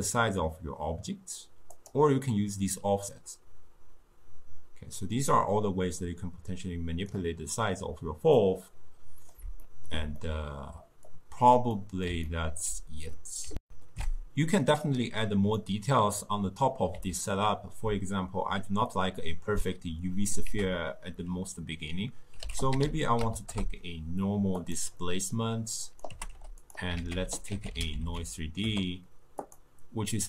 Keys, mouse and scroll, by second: 2.8-5.8 drag, 8.5-11.2 middle drag, 11.2 click, 11.8-13.7 middle drag, 13.7 ctrl+alt+shift+q, 15.6-20.3 middle drag, 20.5 ctrl+a, 25.0-25.8 middle drag, 25.8 click, 26.1 g, 27.0 ctrl+a.